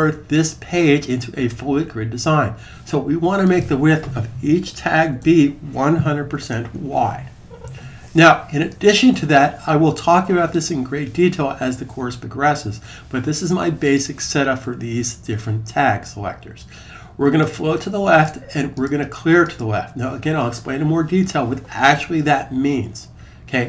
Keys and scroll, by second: 4.4-6.2 typing.